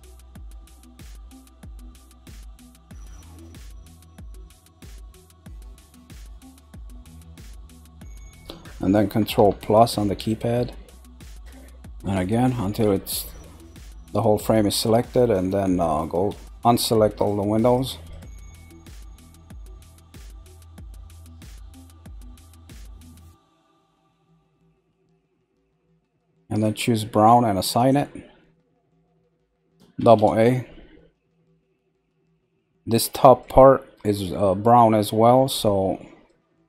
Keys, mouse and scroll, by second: 0.8 shift+click, 1.2 shift+click, 1.7 click, 2.1 click, 2.5 click, 3.1 click, 3.5 click, 3.9 click, 4.9 click, 5.2 shift+Left, 5.8 shift+Left, 5.8 click, 6.3 shift+Left, 6.3 click, 7.0 shift+Left, 7.0 click, 7.4 shift+Left, 7.4 click, 16.3 ctrl+click, 16.4 ctrl+z, 16.5 click, 17.1 click, 17.6 click, 18.1 click, 18.6 click, 19.1 click, 19.6 click, 19.6-20.0 ctrl+scroll, 19.9 click, 20.4 click, 20.4-21.4 ctrl+scroll, 20.8 click, 21.3 click, 21.8 shift+click, 23.0 shift+click, 23.6 shift+click, 24.1 shift+click, 24.6 click, 25.3 shift+click, 25.8 shift+click, 26.1 shift+z, 26.6 shift+click, 27.7 click, 28.7 scroll down 1, 29.9 a, 30.6-31.9 middle drag, 31.9 scroll up 2, 32.5-34.6 shift+middle drag, 34.6-35.5 scroll up 1, 35.5-36.5 middle drag, 36.5-36.6 scroll up 1.